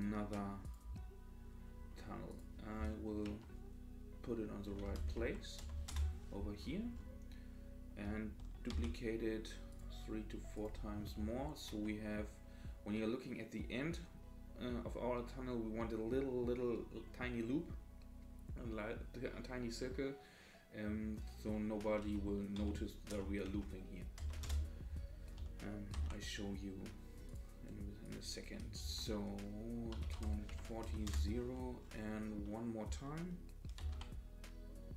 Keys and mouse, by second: 2.5-6.4 drag, 8.7 shift+d, 10.5-25.0 drag, 26.0 shift+d, 28.1-31.5 drag, 33.8 shift+d.